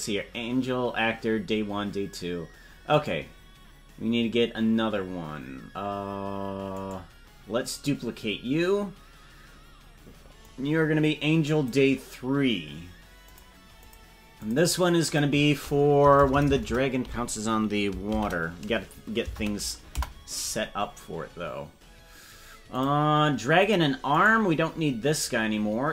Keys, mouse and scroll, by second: 1.3-1.7 scroll down 3, 2.9-10.4 right drag, 10.4-12.2 drag, 13.3 click, 13.8 click, 14.4 click, 14.7-20.5 drag, 16.2 BackSpace, 22.7 click, 23.6 click, 24.1-25.9 right drag.